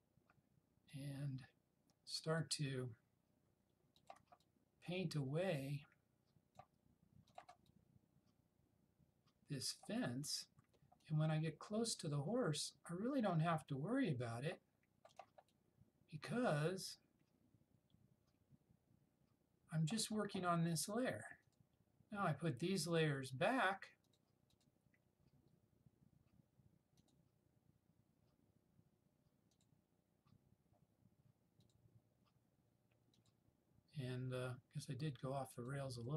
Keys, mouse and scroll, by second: 29.6 click, 35.6 click.